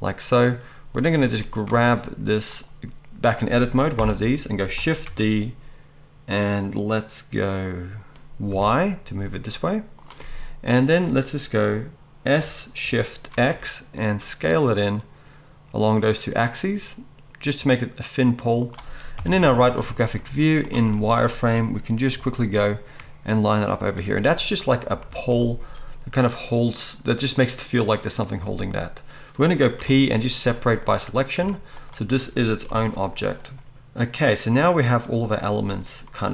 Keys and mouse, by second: 1.6 Tab, 2.5 middle click, 2.6-12.4 right drag, 3.9 ctrl+l, 5.0 shift+d, 12.4-21.2 drag, 12.4 s, 19.2 KP_3, 20.3 z, 21.2-30.5 shift+middle drag, 22.1 g, 25.1 z, 29.8 p, 30.5-31.8 drag, 31.3 Tab, 31.8-33.3 right drag, 32.6 g, 33.3-36.3 middle drag.